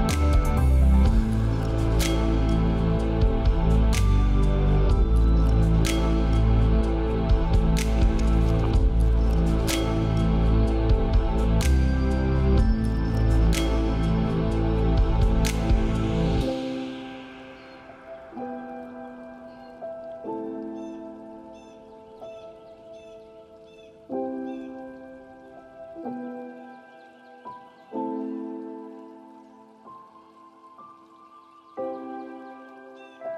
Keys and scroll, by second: 20.2 ctrl+space, 27.4 ctrl+space.